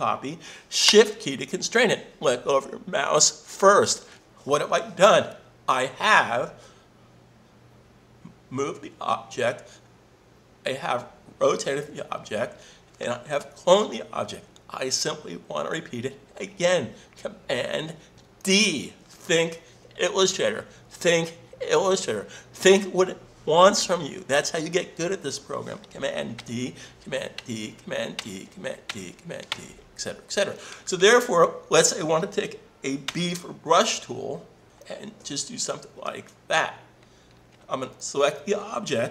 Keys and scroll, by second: 26.3 super+d, 33.2 b.